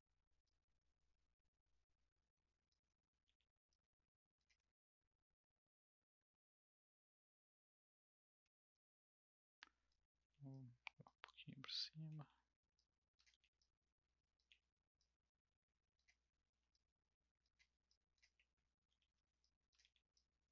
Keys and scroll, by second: 3.2 r, 10.2 w, 11.6 e, 12.1 r, 13.3 w, 14.5 r, 18.8 w, 19.8 r.